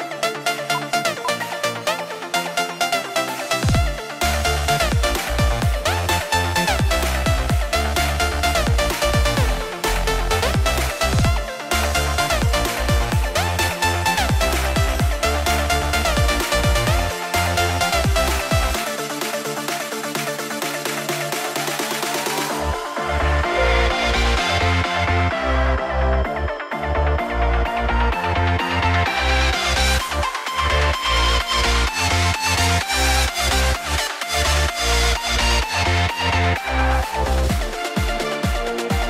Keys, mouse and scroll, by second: 1.2 ctrl+k, 10.2-10.6 scroll down 1, 21.7 double click, 34.3 double click.